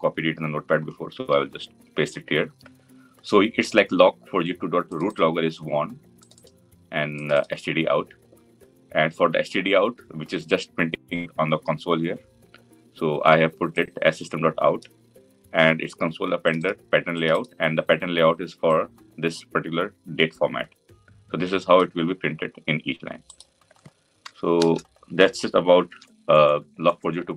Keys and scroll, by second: 5.3 ctrl+v, 25.7 ctrl+s.